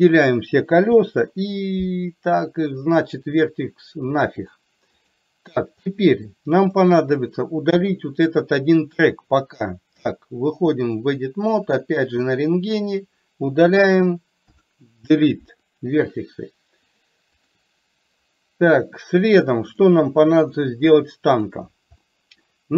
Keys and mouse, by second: 0.9 Delete, 4.6-5.2 drag, 5.9 middle click, 6.7 click, 7.9 KP_1, 9.3-11.3 drag, 12.4 click, 14.6 Delete, 16.9-17.6 drag, 20.7 middle click, 22.1-22.6 middle drag.